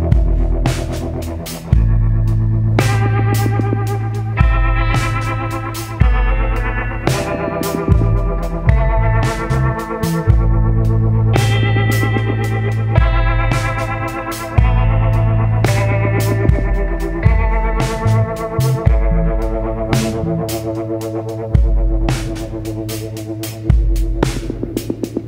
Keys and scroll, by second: 4.9 ctrl+t.